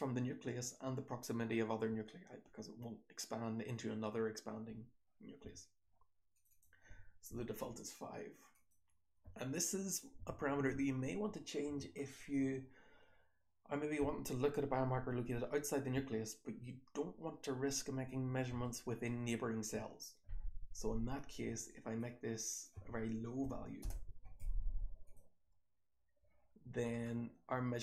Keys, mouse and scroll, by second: 24.4 click, 26.9-27.8 scroll up 2.